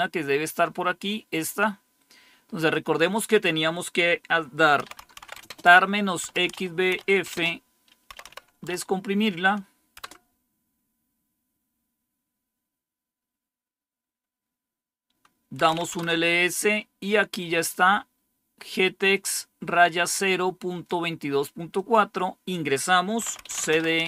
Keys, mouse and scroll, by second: 1.5-3.9 drag, 4.5-8.7 typing, 9.9 Return, 10.9 typing, 15.3-16.5 typing, 19.0-23.1 drag, 22.9-24.0 typing.